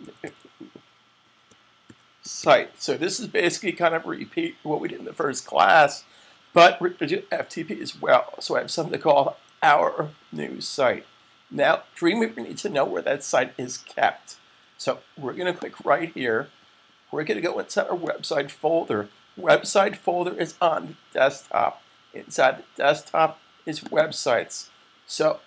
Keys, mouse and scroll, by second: 0.0-2.7 typing, 4.5-5.2 typing, 15.3 click, 23.7 double click.